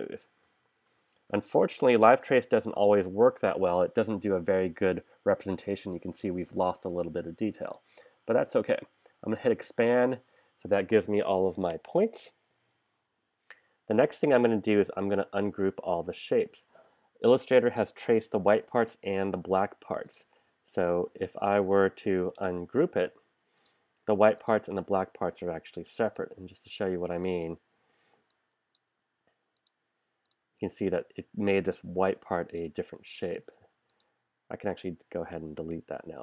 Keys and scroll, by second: 0.0 super+-, 1.4 space, 2.8 super+-, 22.6 shift+super+g, 34.8 BackSpace.